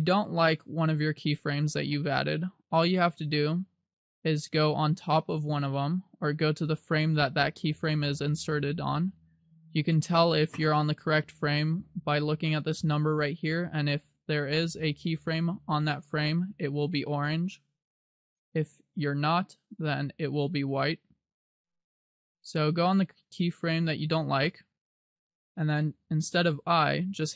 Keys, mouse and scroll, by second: 18.4 click, 24.4 click.